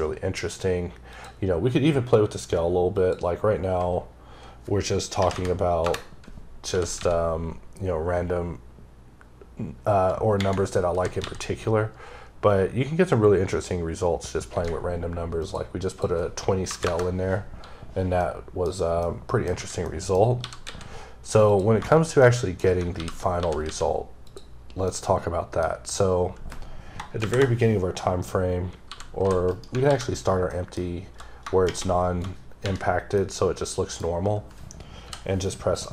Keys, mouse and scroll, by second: 2.8 click, 5.0 KP_2, 5.7 KP_Enter, 6.6 g, 8.9 typing, 15.3 click, 15.7 click, 16.5 KP_0, 16.6 KP_Enter, 18.1 middle click, 18.9 middle click, 20.2 g, 21.3 click, 21.7 shift+middle click, 22.8 alt+g, 24.1 click, 24.4 scroll down 1, 24.7 middle click, 27.1 shift+Left, 29.3 right click, 29.7 alt+g, 30.3 middle click, 33.0 middle click, 35.6 click.